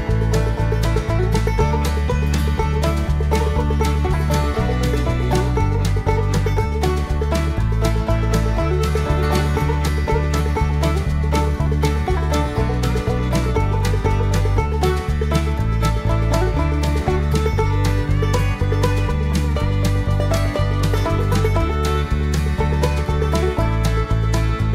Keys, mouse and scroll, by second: 0.9 click, 2.6 click, 3.9 click, 5.7 click, 7.5 click, 8.7 click, 9.9 click, 11.5 click, 16.9 click, 17.7 click, 19.1-19.5 scroll down 2, 20.1 click, 23.4 click.